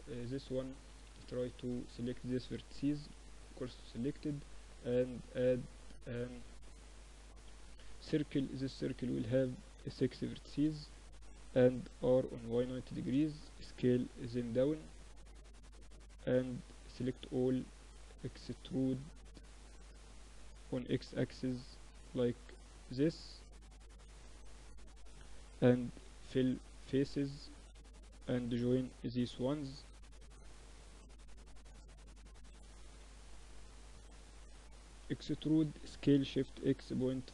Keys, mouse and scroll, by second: 0.1 Tab, 1.7 shift+s, 2.6 Tab, 3.6 shift+a, 7.7 F6, 11.1 r, 12.9 s, 14.8-16.3 middle drag, 15.2 Tab, 15.9 a, 16.1 a, 19.8 e, 23.9-25.7 middle drag, 24.9 f, 25.7-28.1 drag, 28.3-30.9 typing, 30.4 middle click, 32.0 a, 32.9 b, 33.4 click, 34.5 e.